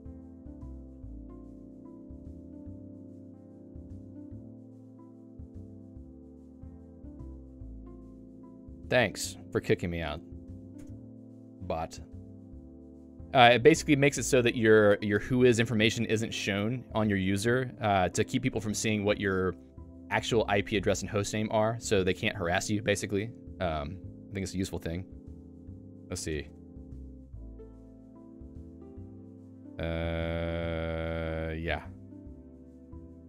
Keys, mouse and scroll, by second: 0.4 Return, 2.7 click, 3.5 !, 7.9 click, 8.0 Escape, 10.1 a, 11.5 Return, 12.4 ctrl+g, 12.8 Escape, 13.2 click, 16.2 a, 24.4 /, 25.9 BackSpace, 26.1 BackSpace, 26.7 w.